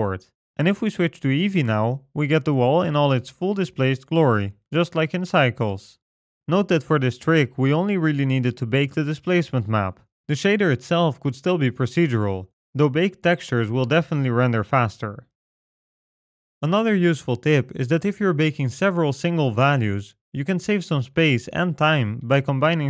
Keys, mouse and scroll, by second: 0.5 middle click, 0.8-1.3 scroll down 2, 1.3 middle click, 1.7-2.3 scroll up 1, 2.7 click, 5.0 middle click, 6.2-7.5 scroll up 5, 7.5 middle click, 11.5 middle click, 12.7-13.7 scroll down 3, 13.7-14.0 scroll down 2, 14.2 middle click.